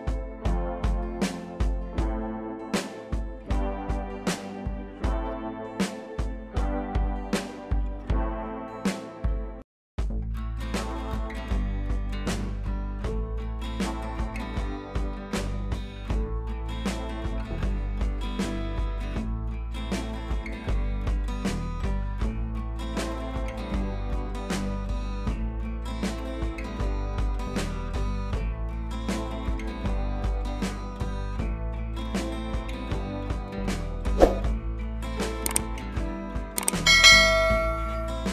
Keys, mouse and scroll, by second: 18.7 click, 19.3 scroll down 1, 19.5 click, 19.8 scroll down 1, 21.6 scroll up 1, 22.7 click, 24.9 scroll up 1, 25.1 click, 26.2 b, 27.0-28.7 drag, 35.7 scroll down 1, 36.4 click.